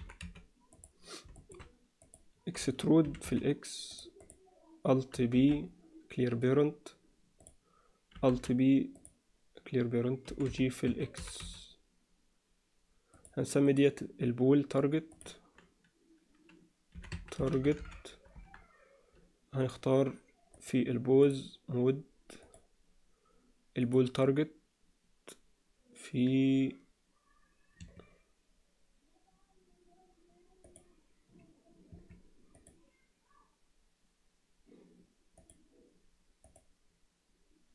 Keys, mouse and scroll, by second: 1.4 shift+middle click, 2.0 click, 3.0 e, 4.2 click, 5.3 alt+p, 8.3 alt+p, 10.2 g, 11.2 g, 13.6 click, 15.1-18.6 drag, 19.6 click, 20.6-21.3 drag, 22.4 click, 23.8-27.9 drag, 30.6-32.0 drag, 32.6 click, 35.4 click, 36.4-37.7 drag.